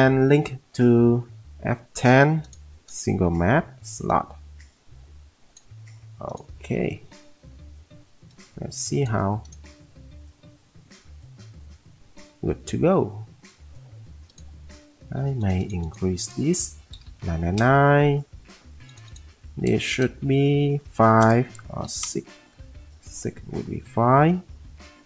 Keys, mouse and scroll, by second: 5.5 click, 17.1 9, 17.2 9, 17.5 Return, 20.9 9, 20.9 5, 21.8 6, 22.0 Return.